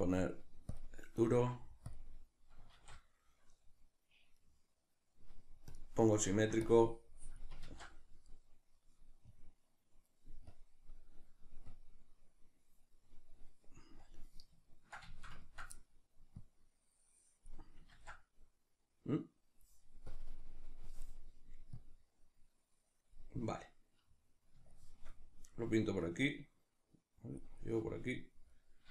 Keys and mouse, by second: 1.4 click, 1.4 f, 2.2-5.7 middle drag, 2.9 alt+q, 5.7 click, 6.3 ctrl+middle click, 6.7-9.8 drag, 7.7 ctrl+z, 14.7-16.4 ctrl+middle drag, 16.4-20.1 drag, 18.0 ctrl+z, 23.6-26.1 middle drag, 26.1-27.6 drag, 27.6-28.9 middle drag.